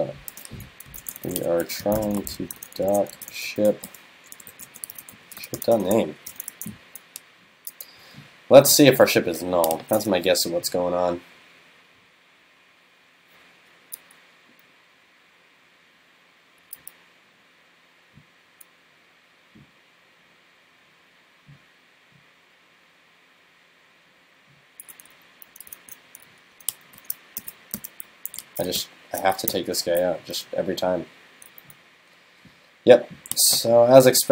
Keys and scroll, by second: 6.1 super+Right, 6.5 super+s.